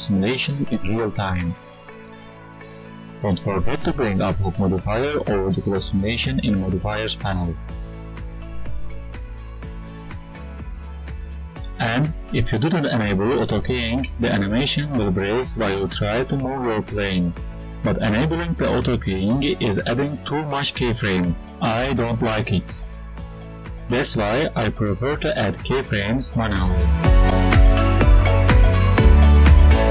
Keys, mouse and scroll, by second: 0.0-3.4 typing, 0.6 click, 0.7 right click, 1.5 click, 1.8 click, 2.7 click, 2.9 click, 4.6 space, 4.7 click, 5.1 click, 5.5 click, 5.8 click, 6.2 click, 6.4 space, 6.7 space, 6.9 space, 7.4 space, 7.4-8.0 scroll down 12, 8.4 click, 9.1 click, 9.5 click, 9.9 g, 10.4 space, 10.5 g, 11.3 space, 11.4 click, 11.7 click, 12.3 click, 13.1 x, 13.4 click, 13.9 space, 13.9 g, 15.6 space, 15.8 click, 15.9 space, 17.7 space, 18.0 click, 18.3 g, 19.0 space, 20.7 space, 20.9 click, 21.2-21.5 scroll down 15, 21.5 click, 22.8 space, 23.5 g, 25.3 click, 25.4 g, 27.1 space, 27.3 click, 27.4 scroll down 1, 27.6 right click, 28.7 x, 29.2-29.9 ctrl+z.